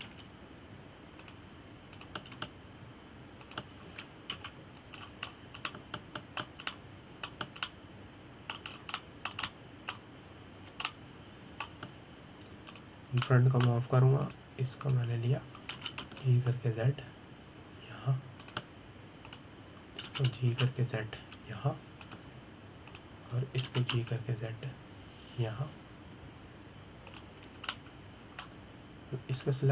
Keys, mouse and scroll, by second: 0.8 click, 1.7 g, 3.6 click, 4.0 g, 6.0 KP_1, 6.7-7.4 scroll down 10, 7.4-10.4 middle drag, 10.4 scroll up 2, 10.7-14.4 middle drag, 14.4 click, 14.9-15.9 middle drag, 15.9 click, 16.5 click, 17.4 g, 20.9 click, 21.7 g, 24.6 click, 25.3 g, 29.4-29.7 shift+middle drag.